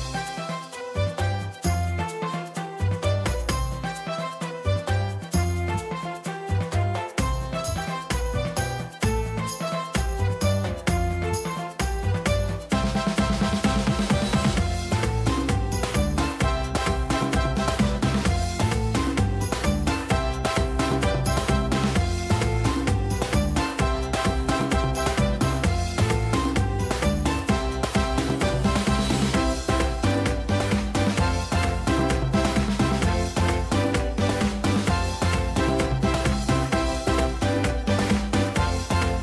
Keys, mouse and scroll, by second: 22.4 ctrl+z, 22.9 ctrl+z, 26.6 ctrl+z, 31.2 ctrl+z, 31.9 ctrl+z, 34.9 click, 37.6 ctrl+z.